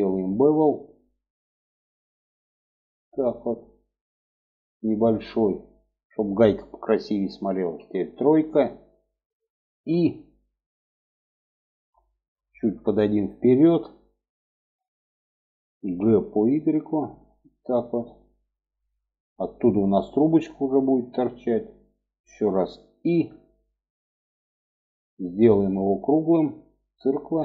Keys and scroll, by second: 7.1 3, 9.1 i, 15.2 g, 22.3 |.